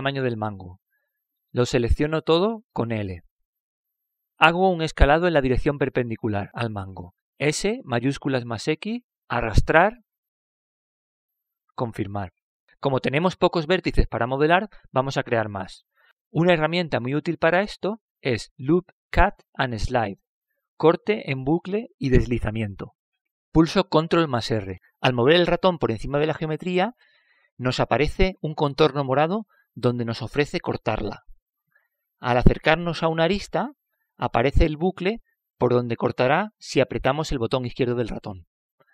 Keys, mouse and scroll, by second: 0.9-2.3 middle drag, 2.8 middle click, 4.2 l, 8.9 s, 15.6-17.3 middle drag, 19.1-22.9 middle drag, 23.0 middle click, 25.7 ctrl+r.